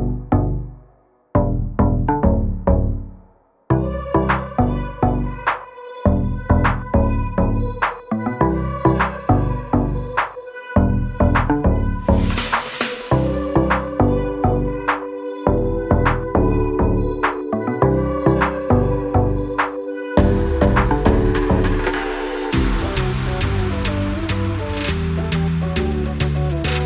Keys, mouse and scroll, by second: 18.1 scroll down 1, 19.2 click, 23.7 scroll down 1, 25.6 click.